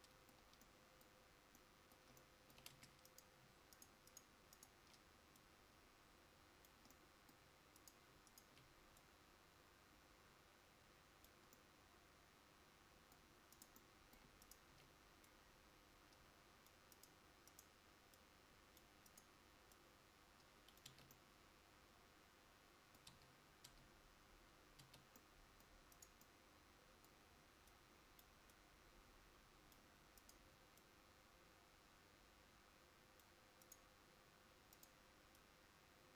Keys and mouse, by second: 2.8 Tab, 21.0 Tab, 23.2 Tab.